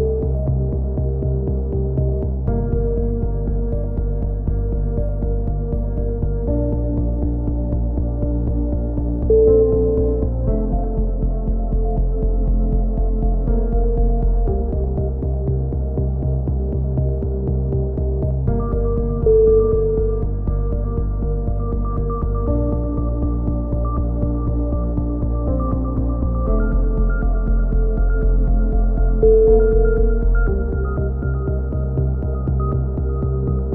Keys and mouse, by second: 0.2 KP_7, 1.2-1.9 drag, 1.4 z, 1.9-2.8 right drag, 1.9 z, 2.8-3.3 middle drag, 3.9 KP_1, 4.5 KP_7, 4.6 z, 6.0 a, 6.3 z, 6.5 z, 6.8 click, 11.8 drag, 12.8 k, 15.7 a, 15.8 z, 16.1-16.8 middle drag, 20.2-22.5 drag, 20.7-21.5 right drag, 22.6 ctrl+z, 23.4 click, 24.0 a, 24.3-24.8 drag, 26.4 KP_3, 26.5 middle click, 26.6 z, 27.9-28.4 drag, 27.9 z, 29.4-30.4 middle drag, 29.4 KP_3, 29.5 z, 31.0-33.5 typing, 31.3 Tab, 31.9-32.3 drag, 33.0 Tab.